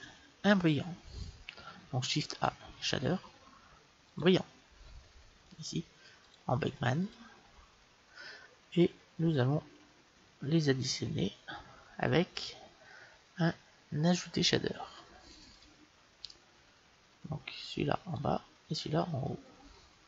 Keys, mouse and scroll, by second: 2.1 shift+a, 6.1-8.0 drag, 10.5 shift+a, 15.5-17.3 drag, 17.5-20.0 drag.